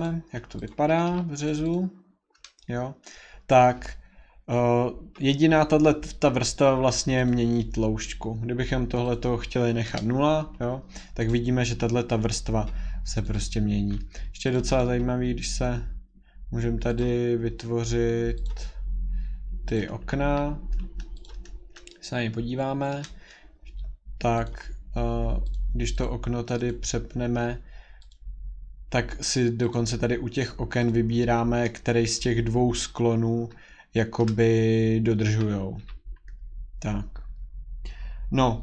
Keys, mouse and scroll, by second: 0.1 click, 0.7 click, 0.9 Escape, 1.1 Escape, 1.5 click, 1.8 click, 2.6-5.7 scroll, 2.7 middle click, 2.8 middle click, 5.7 scroll, 7.2 click, 9.1 click, 10.7 0, 10.8 scroll, 11.3 click, 13.2 click, 13.5 click, 14.5 click, 14.8 right click, 16.9 click, 18.5 click, 19.8 click, 20.1 Escape, 20.3 Escape, 21.2 click, 23.0 shift+middle click, 24.4 click, 25.6 click, 26.0 click, 26.6 click, 28.0 shift+scroll, 28.2 click, 29.7 click, 30.9 click, 34.2 shift+middle click, 35.8 Escape, 36.2 middle click, 36.3 scroll.